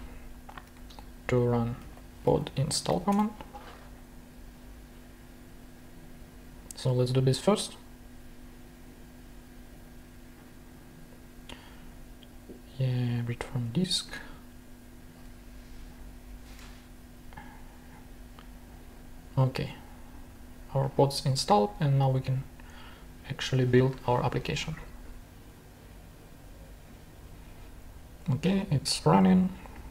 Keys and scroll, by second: 1.5-3.2 typing, 16.6 super+Tab.